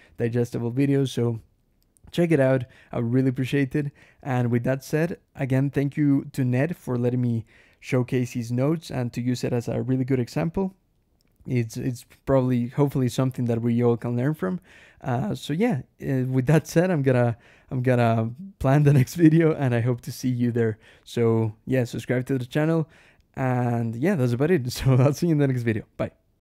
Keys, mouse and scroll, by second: 12.3 Escape, 12.5 k.